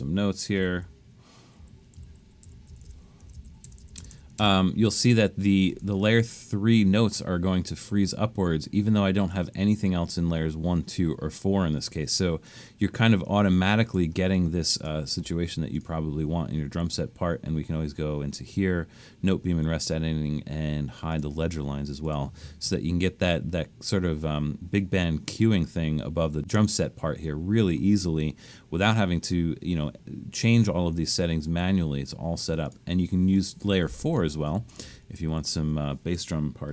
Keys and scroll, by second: 0.0-2.9 typing, 0.5 Left, 3.3 Left, 3.8 Left, 4.1 Left, 34.5 shift+Down, 34.8 Up, 35.2 Up.